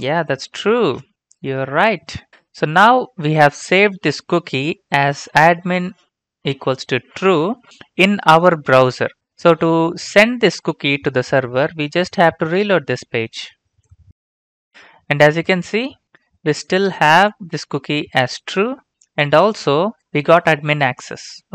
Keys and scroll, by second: 0.5-1.6 typing.